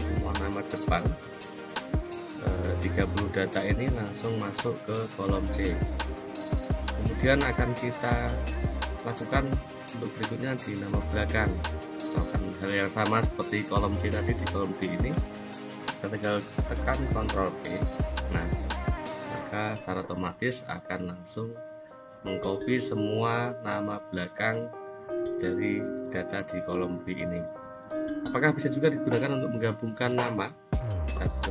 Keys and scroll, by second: 17.0 ctrl+e.